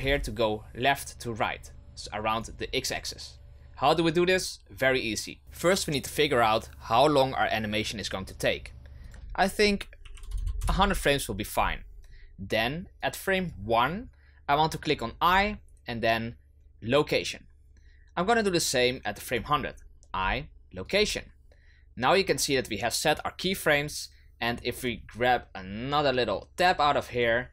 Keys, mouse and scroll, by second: 9.1-10.3 drag, 10.3 KP_0, 13.0-15.2 drag, 18.9-20.0 drag, 24.5-27.5 drag.